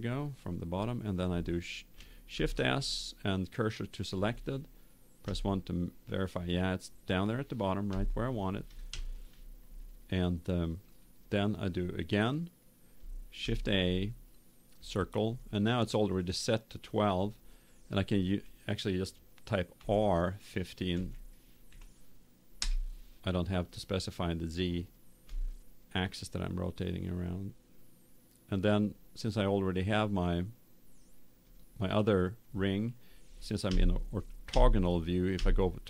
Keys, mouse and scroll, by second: 2.3 shift+s, 5.2 KP_1, 7.9 KP_7, 13.3 shift+a, 19.7 r, 25.2 s, 31.5 click, 32.5-33.5 middle drag, 33.6 KP_5, 33.7 middle click, 34.5 KP_5, 35.3 KP_5.